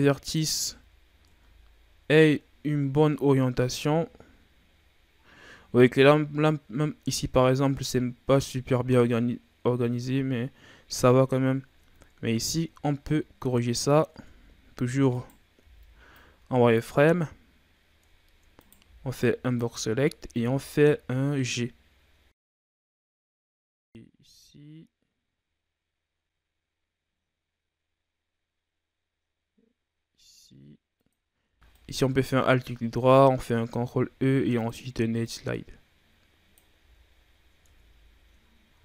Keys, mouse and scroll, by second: 0.5 z, 0.8-1.2 scroll down 3, 1.2 Tab, 1.6-2.3 scroll down 4, 2.3-2.8 ctrl+scroll up 5, 2.8 scroll down 2, 3.7 z, 4.8-5.3 scroll up 5, 5.5-8.7 scroll down 6, 11.9 ctrl+scroll down 3, 12.2-14.1 scroll up 5, 14.1 Tab, 15.1 right click, 15.6 b, 17.0-18.1 scroll up 5, 18.1-18.5 ctrl+scroll down 4, 18.5 right click, 18.8 b, 20.3 g, 23.9 g, 31.7 alt+right click, 32.3-32.6 scroll down 5, 32.6-33.7 ctrl+scroll up 6, 33.7 ctrl+e, 37.1-37.6 scroll down 4, 37.6 Tab, 38.0-38.6 scroll down 6, 38.6-38.8 scroll up 3.